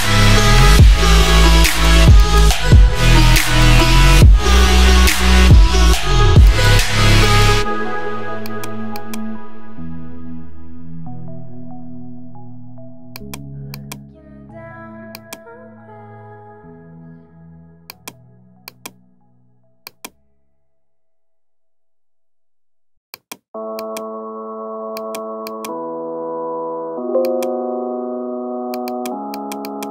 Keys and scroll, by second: 26.7 ctrl+j.